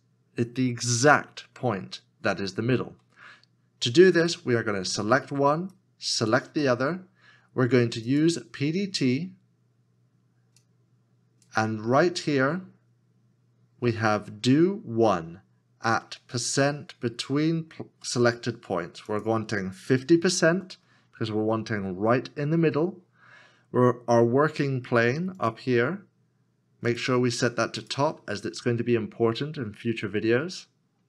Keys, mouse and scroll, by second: 5.8 shift+click, 20.2 5, 20.4 0.